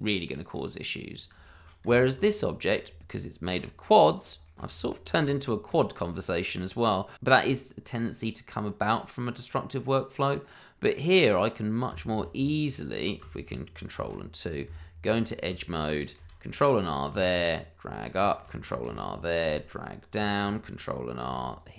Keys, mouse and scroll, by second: 1.1-1.4 scroll down 1, 1.4 shift+middle click, 1.8 Tab, 2.3 click, 2.6 scroll up 1, 2.8 Tab, 3.8 middle click, 4.5 shift+middle click, 6.8 middle click, 7.5-8.1 scroll down 1, 8.2 shift+middle click, 8.3 middle click, 8.3 shift+middle click, 9.0 middle click, 9.1 shift+middle click, 9.3 scroll up 1, 9.6 shift+middle click, 11.7 middle click, 11.9 Tab, 13.9 ctrl+2, 14.6 Tab, 16.1 ctrl+r, 16.6 click, 18.8 ctrl+r, 19.1 click, 21.2 ctrl+r, 21.5 click.